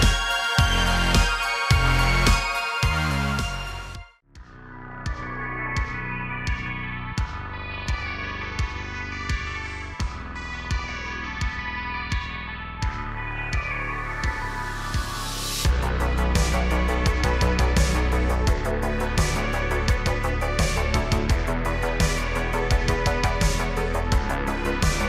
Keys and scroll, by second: 0.1 g, 1.0 s, 2.1-4.0 typing, 5.8 g, 6.0 x, 7.6 a, 7.9 g, 8.0 x, 9.3 shift+d, 9.3 x, 10.2 shift+d, 10.8 x, 14.0 Tab, 14.6 g, 14.8 x, 15.7 g, 15.8 x, 16.8 g, 16.9 x, 17.8 r, 20.0 r, 20.7 Tab, 21.2 Tab, 22.3 Tab, 23.5 r, 24.0 s, 24.9 Tab.